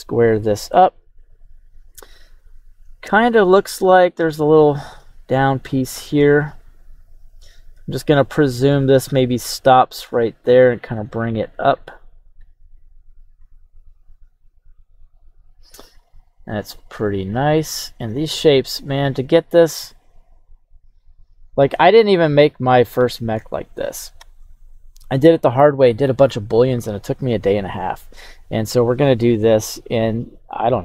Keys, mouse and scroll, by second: 25.3 click, 30.7-30.8 drag.